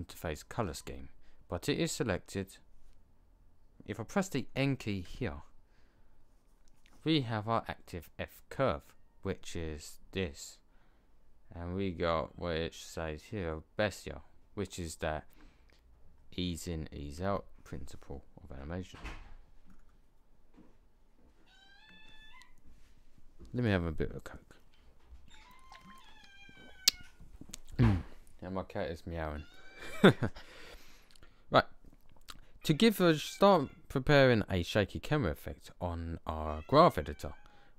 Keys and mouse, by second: 5.0 n.